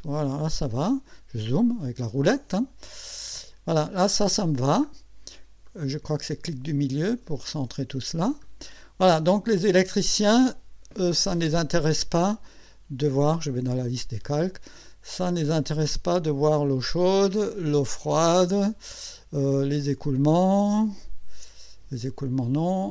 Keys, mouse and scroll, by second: 0.9 scroll up 1, 1.5-2.8 scroll up 4, 3.0-3.7 scroll up 4, 4.4 scroll down 2, 5.6-8.5 middle drag, 9.3 scroll up 2, 13.8 click, 16.6 click, 17.7 click, 19.8 click, 22.2 click.